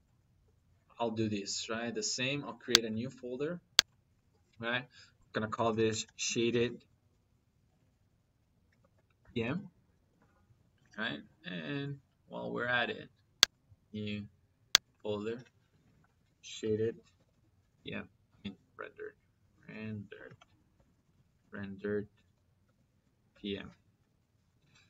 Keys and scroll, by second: 5.7-6.5 typing, 8.6 shift+-, 9.0 p, 9.3 m, 10.0 Return, 15.8-17.7 typing, 18.2 Left, 20.0 r, 20.4 e, 20.6 n, 20.9 d, 22.5 shift+-, 22.9 p, 23.1 m.